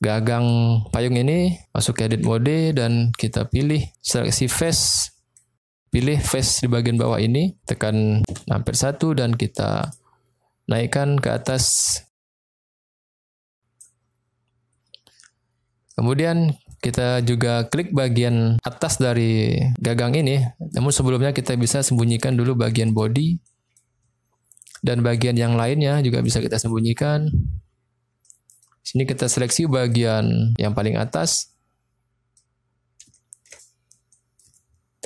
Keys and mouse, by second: 2.1 Tab, 2.8-3.9 middle drag, 4.7 click, 5.1 middle click, 7.0 click, 8.3 KP_1, 9.8 click, 11.3-13.8 drag, 15.8 middle click, 17.1-18.3 middle drag, 20.2 middle click, 21.0 middle click, 22.7 click, 23.3 middle click, 25.6 click, 28.3 middle click, 29.9 click, 31.2-32.4 middle drag, 33.1 shift+middle click, 34.0 middle click.